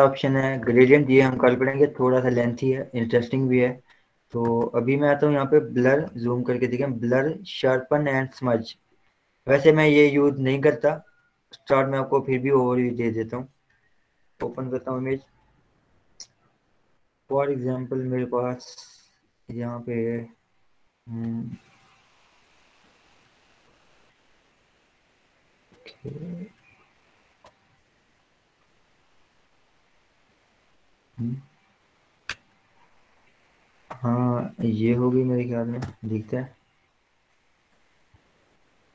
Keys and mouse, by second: 0.9 right click, 2.4 click, 4.6 right click, 14.6 click, 15.0 ctrl+o, 17.5-33.4 drag, 35.2 click, 36.2 Return.